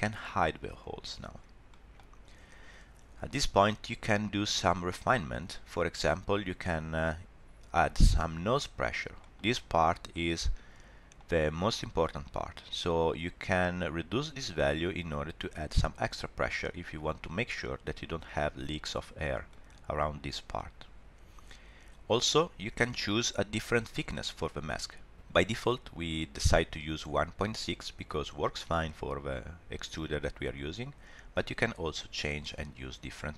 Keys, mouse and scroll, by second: 0.9 click, 1.7 middle click, 2.1 scroll down 1, 6.9 scroll up 1, 8.9 shift+middle click, 9.2 middle click, 10.1 middle click, 13.5 click, 19.5 middle click, 22.6 scroll up 1, 22.8 middle click, 23.8 scroll up 1, 24.1 shift+middle click, 24.3 middle click, 31.8 click.